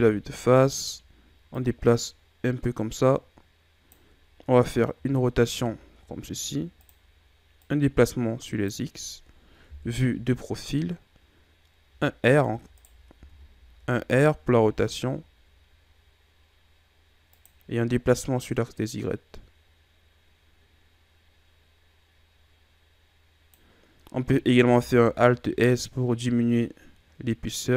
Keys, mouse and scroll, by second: 0.0 z, 1.6 click, 5.0 r, 7.6 click, 9.7 KP_3, 12.1 e, 13.2 ctrl+z, 14.1 r, 18.2 click, 24.8 alt+s.